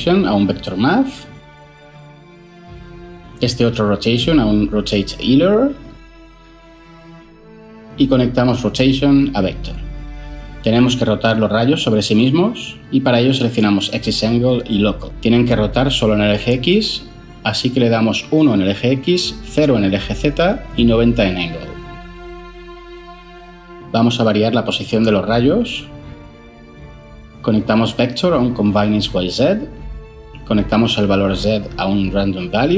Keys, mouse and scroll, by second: 0.0-0.3 typing, 0.5 Down, 0.8 Return, 2.1 ctrl+z, 4.8-5.2 typing, 5.5 Return, 17.9 1, 18.2 Return, 19.8 0, 20.0 Return, 21.4-21.7 typing, 28.2 typing, 28.5 Down, 28.7 Return, 31.7-32.5 typing.